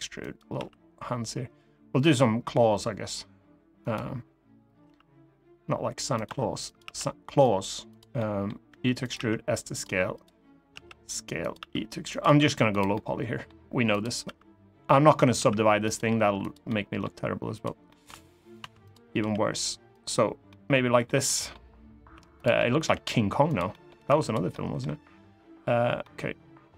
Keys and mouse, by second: 0.3 s, 3.5 click, 5.9 click, 5.9 s, 6.0 e, 6.4 click, 6.6 s, 7.1 click, 7.7 click, 7.9 middle click, 8.4 e, 8.7 click, 8.9 s, 9.5 click, 9.9 click, 10.5 s, 11.1 click, 11.3 e, 11.8 click, 12.0 s, 12.4 click, 12.6 middle click, 14.0 e, 14.9 click, 15.1 s, 15.6 click, 15.7 g, 16.1 click, 16.4 middle click, 17.3 click, 17.6 middle click, 18.3 2, 18.5 click, 18.9 g, 19.6 click, 20.2 middle click, 21.0 middle click, 21.9 3, 22.1 click, 22.3 middle click, 22.6 g, 23.2 click, 23.4 middle click, 23.8 3, 24.2 middle click, 25.8-26.7 middle drag.